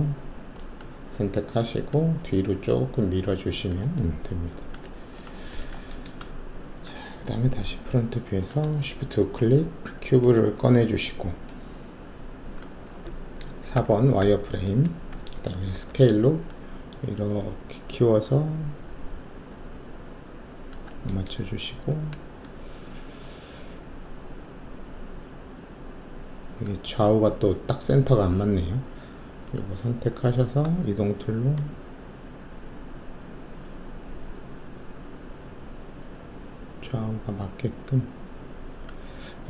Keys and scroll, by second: 7.5 alt+shift+3, 13.7 4, 15.7 alt+r, 30.5 w.